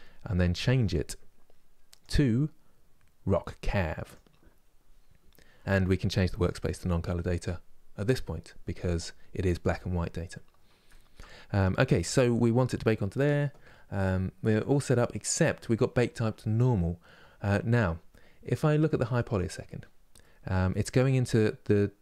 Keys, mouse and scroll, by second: 1.7-18.0 drag, 19.0 click.